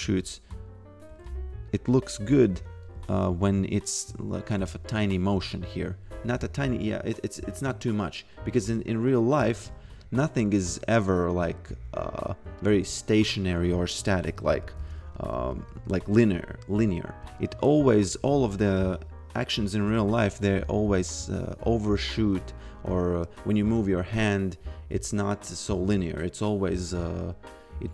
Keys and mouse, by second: 0.1 f, 1.7 click, 3.1 a, 3.5 f, 5.3 f, 10.1 click, 13.6 a, 17.2 f, 20.7 click.